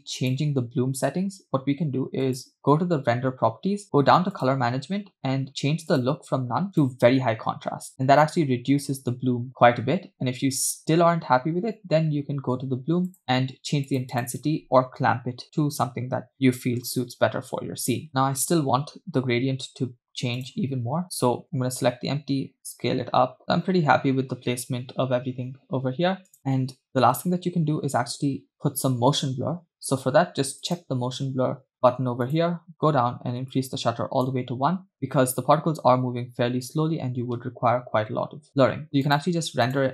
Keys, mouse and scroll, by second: 0.2 click, 2.3 click, 3.9-4.4 scroll down 4, 4.4 click, 4.9-5.9 scroll down 1, 5.9-7.0 drag, 8.5 scroll up 3, 9.5 scroll down 2, 12.3 scroll up 2, 13.1 click, 13.9 click, 17.1 space, 18.1 click, 20.4 drag, 21.6 s, 26.3 click, 27.1 space, 30.8 click, 32.3 click, 33.0 scroll down 1, 33.5 click, 39.1 click.